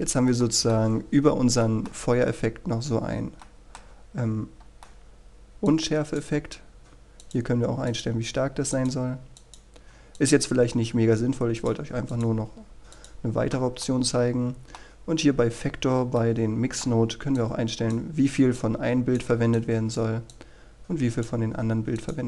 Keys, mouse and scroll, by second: 0.6-1.6 scroll up 1, 1.6-6.2 middle drag, 6.8-8.2 drag, 15.0-16.2 middle drag, 18.5-22.2 drag.